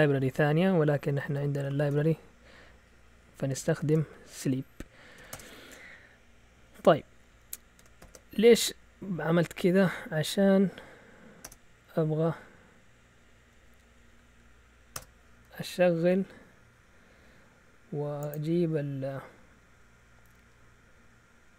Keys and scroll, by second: 0.9-2.4 typing, 3.5 Escape, 3.6-5.6 typing, 7.1 Up, 7.3 Up, 8.0 ctrl+l, 9.3 Up, 11.1-11.9 typing, 11.9 Up, 12.2 Up, 13.5 Up, 14.9 Return.